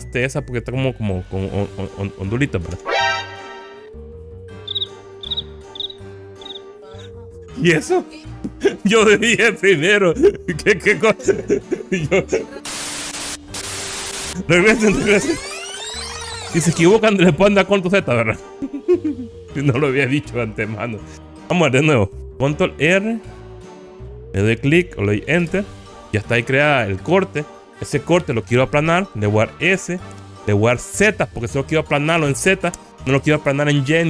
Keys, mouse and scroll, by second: 2.9 0, 15.8 ctrl+z, 16.9 Return, 17.5 ctrl+z, 23.0 ctrl+r, 29.8 s, 31.0 z.